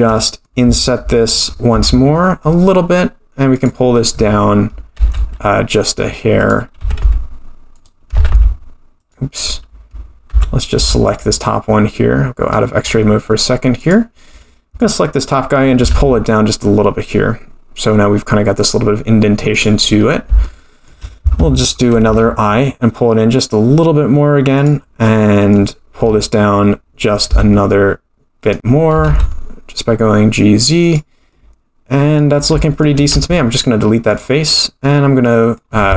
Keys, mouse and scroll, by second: 0.2 middle click, 1.7 i, 5.0 e, 6.8 s, 8.2 g, 10.3 Tab, 10.8 Tab, 11.1 click, 12.4-13.8 scroll down 6, 13.8 click, 13.8 scroll down 1, 14.8 click, 15.3-15.8 scroll up 1, 15.8 g, 20.0 scroll up 2, 20.4 shift+middle click, 21.0 scroll down 1, 22.1 i, 25.0 middle click, 27.3 e, 28.9 g, 31.3 middle click, 32.6 shift+middle click, 33.1 x, 34.1 click, 34.8 scroll down 1, 35.2 middle click.